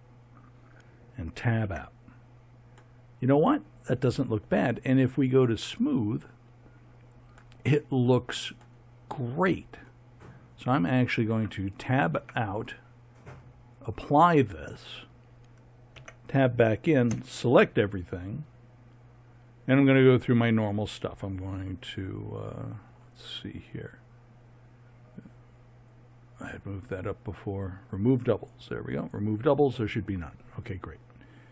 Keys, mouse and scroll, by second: 1.6 Tab, 7.3-7.7 drag, 8.2 click, 11.3 Tab, 12.2 Tab, 13.7-15.6 drag, 15.9 Tab, 17.1 a.